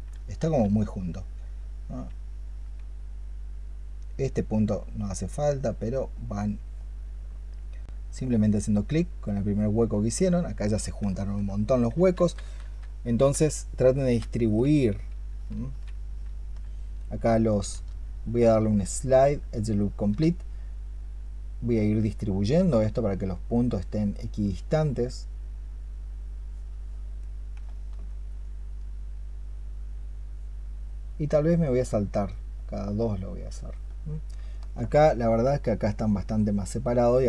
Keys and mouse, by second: 0.3 ctrl+z, 11.0 alt+click, 12.3 ctrl+z, 13.0 ctrl+z, 13.9 ctrl+z, 14.3 ctrl+z, 14.8 ctrl+z, 15.2 ctrl+z, 16.0 ctrl+z, 17.6 ctrl+z, 18.1-19.9 space, 27.6 alt+click, 27.9 alt+click, 34.3 alt+click.